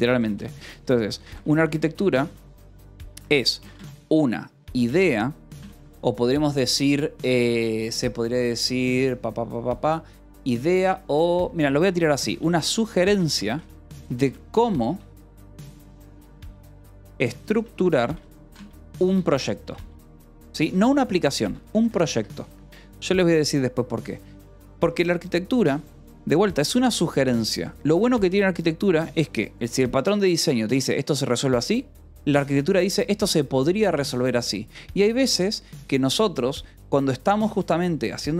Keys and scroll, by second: 0.0-5.5 typing, 12.1-14.4 typing, 15.8-22.2 typing, 30.6 Escape, 31.9 j, 32.4 Escape.